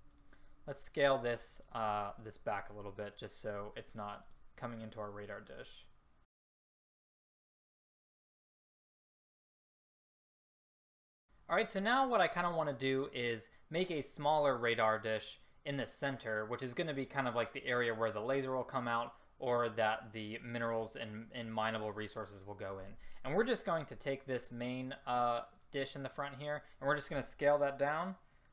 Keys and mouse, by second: 6.4 ctrl+z, 6.6 click, 7.4 ctrl+z, 7.9-9.1 typing, 8.4 right click, 8.8 ctrl+z, 11.0 a, 23.9-25.1 drag, 25.7-26.2 drag.